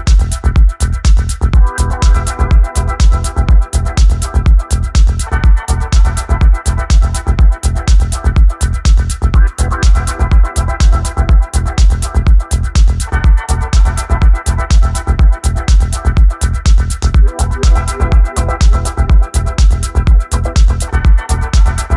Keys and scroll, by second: 1.6-3.2 typing, 8.1 0, 8.4 Return, 18.7 w, 21.6-21.9 typing.